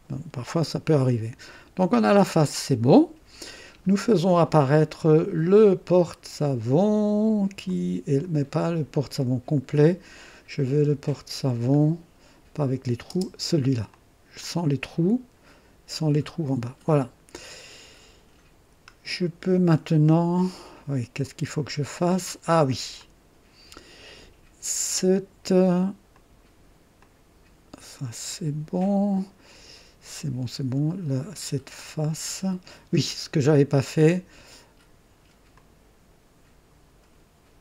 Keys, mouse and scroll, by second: 0.8-3.4 drag, 6.0-6.7 scroll up 2, 7.6 click, 8.5-9.4 scroll up 2, 10.6 scroll up 2, 12.6 click, 13.1 space, 13.9 click, 14.4-22.2 drag, 23.0-24.0 drag, 26.1 click, 27.0-29.0 drag, 35.5 click.